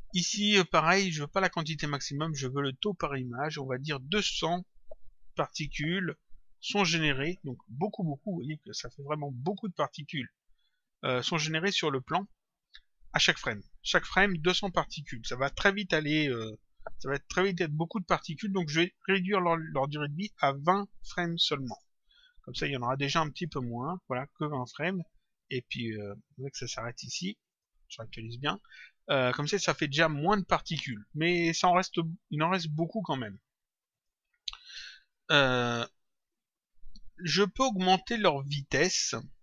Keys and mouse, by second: 1.5 click, 2.8 click, 5.8 click, 8.5 click, 11.1 click, 19.0 click, 22.0 click, 23.2 click, 27.4 click, 33.0 click, 38.8 click.